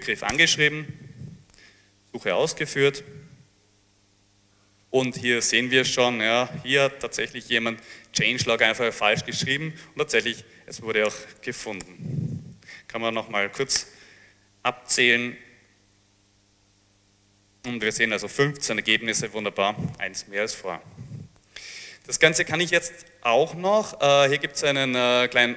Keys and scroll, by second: 0.0-0.1 typing, 0.8 Return, 11.1 Up, 11.1-14.1 typing.